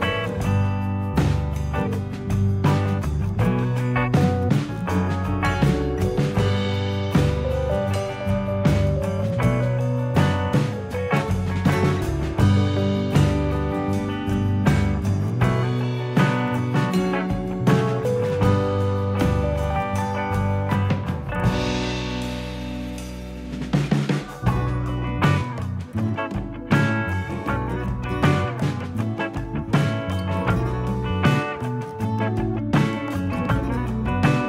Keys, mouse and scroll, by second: 2.4-2.9 scroll down 2, 2.8 scroll up 2, 3.5 Tab, 4.4-5.1 scroll up 2, 5.9 middle click, 6.7 scroll up 1, 7.5 click, 8.3 scroll down 2, 8.8 shift+middle click, 9.5 click, 13.8 KP_3, 15.0 click, 17.4 ctrl+KP_1, 18.3 scroll down 4, 18.7 shift+middle click, 19.1-19.5 scroll up 3, 19.9 shift+middle click, 20.7-21.6 scroll down 2, 22.3 ctrl+r, 24.7 scroll up 2, 25.7 click, 26.9 click, 28.3 x, 30.5 click.